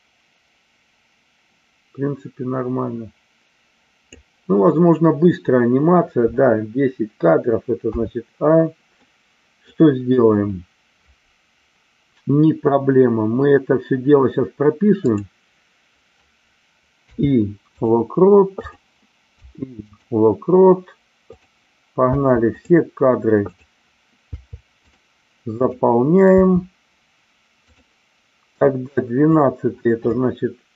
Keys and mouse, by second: 7.8 a, 9.0-9.6 middle drag, 15.1 click, 18.7 click, 19.4 i, 21.3 click, 23.5 click, 24.3 i, 25.7 drag, 26.3 i, 28.5-29.3 drag.